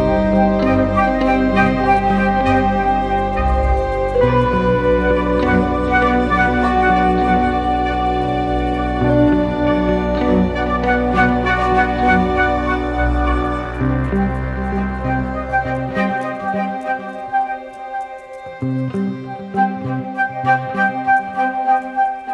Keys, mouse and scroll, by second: 16.7 double click.